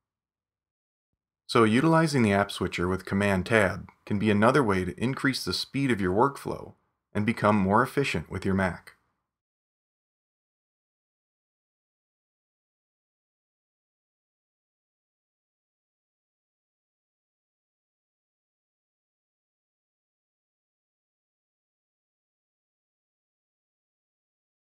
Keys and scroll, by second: 2.2 super+Tab, 4.5 super+Tab, 7.5 super+Tab, 8.7 super+Tab, 12.0 super+Tab.